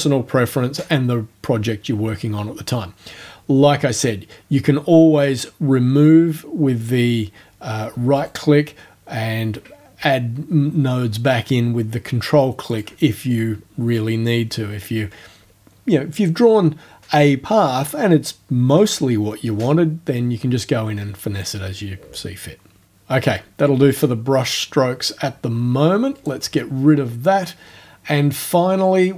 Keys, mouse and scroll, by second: 8.2 right click, 12.7 ctrl+click, 13.4 ctrl+click, 26.2 right click.